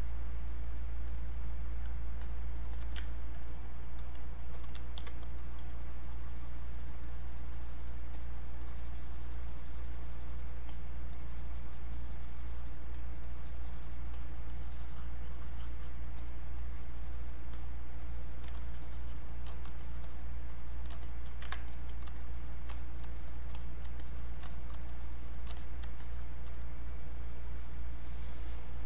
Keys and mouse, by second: 3.1 ctrl+alt+right click, 4.6 ctrl+b, 5.4-19.8 ctrl+drag, 19.8 shift+click, 20.5 shift+click, 21.7 alt+click, 22.2 shift+click, 23.2 shift+click, 24.0 shift+click, 24.9 shift+click, 26.0-28.0 shift+drag, 28.0 click.